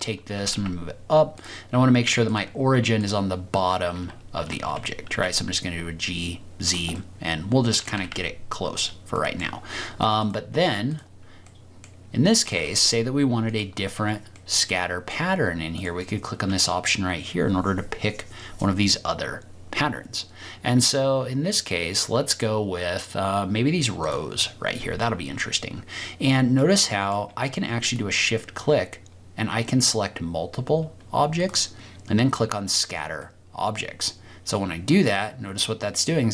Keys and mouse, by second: 0.3 g, 0.5 z, 1.3-2.2 drag, 4.4 g, 5.1 z, 6.6 click, 6.9-7.3 middle drag, 7.3-7.9 drag, 8.1 g, 8.7 click, 9.3 click, 10.2-11.2 drag, 11.5 click, 12.5 g, 12.7 y, 13.5 click, 14.4 click, 16.0-24.1 drag, 26.5 click, 27.9 shift+click, 31.4 click, 33.2-36.3 middle drag.